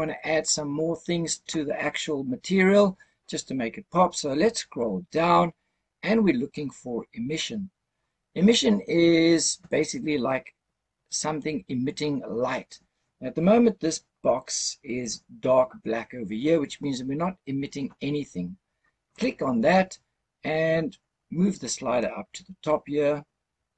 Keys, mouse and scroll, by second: 0.3 click, 4.2-4.7 scroll down 1, 4.7-7.8 scroll down 4, 19.0 click.